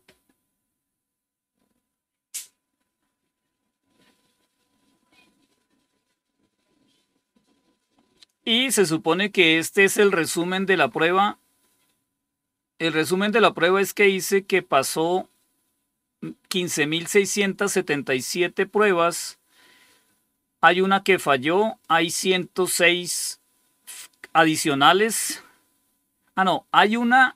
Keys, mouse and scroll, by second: 10.2-12.2 scroll up 2, 12.2-21.1 scroll up 1, 21.1 click.